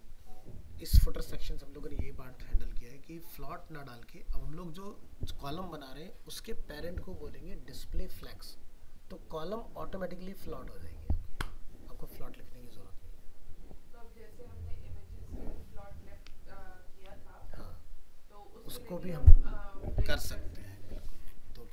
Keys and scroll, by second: 20.5 alt+Tab.